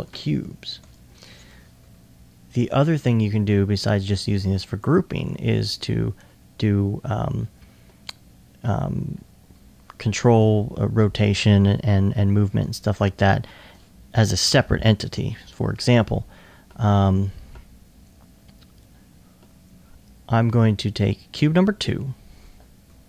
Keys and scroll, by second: 0.0-2.8 typing.